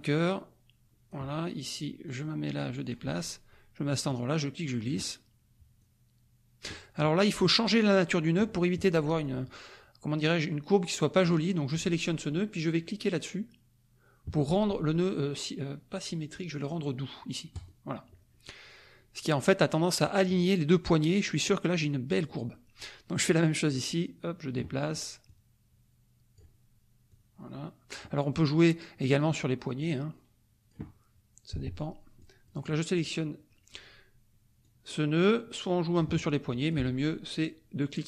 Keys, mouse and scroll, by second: 0.1-1.3 drag, 2.1-3.1 drag, 4.0-5.0 drag, 5.8 click, 7.4 click, 11.2-16.2 drag, 17.5 click, 22.5 middle click, 23.7-24.7 drag, 25.2-26.5 drag, 27.1-28.1 drag, 29.8-30.9 drag, 32.2 click, 34.6-36.1 drag, 36.5 click.